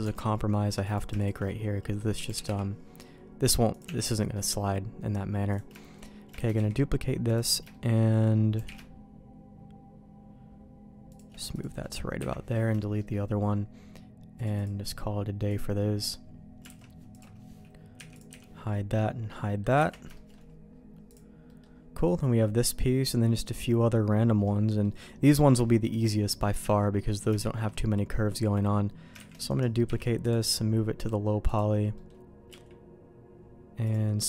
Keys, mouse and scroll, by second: 0.0 Tab, 0.8 click, 1.2 shift+click, 1.4 middle click, 2.2 g, 3.8 Tab, 4.3 middle click, 5.8 middle click, 6.3 shift+d, 7.7 middle click, 8.5 g, 11.5 click, 12.2 Delete, 13.0 middle click, 14.3 click, 14.5 click, 15.5 click, 16.7 alt+a, 17.1 click, 17.9 h, 18.1 click, 18.3 h, 18.9 middle click, 19.8 ctrl+s, 20.1 shift+middle click, 21.1 click, 21.4 middle click, 22.7 middle click, 24.4 middle click, 25.7 shift+middle click, 26.4 middle click, 27.0 middle click, 27.4 shift+middle click, 29.3 shift+d, 29.8 m, 31.4 click, 31.9 middle click, 32.5 q.